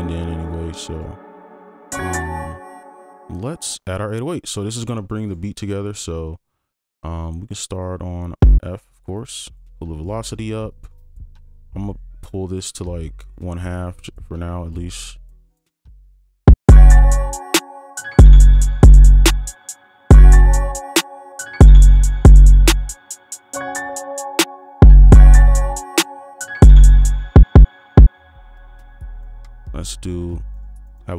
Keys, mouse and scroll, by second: 0.9 double click, 2.2 space, 3.8 double click, 10.2-12.3 scroll up 1, 15.3 alt+click, 16.6 space, 19.8 space, 24.9 space, 26.3 right click, 27.5 double click, 29.6 right click, 29.9 ctrl+click, 30.5 right click, 30.9 ctrl+click.